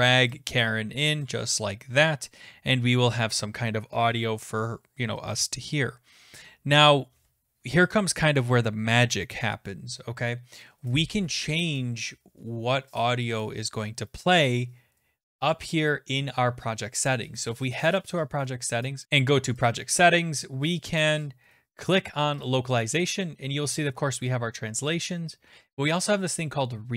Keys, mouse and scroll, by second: 2.2 click, 17.9 click, 19.0 click, 19.0-19.6 scroll up 5, 19.7 click, 22.4 click, 26.0 click.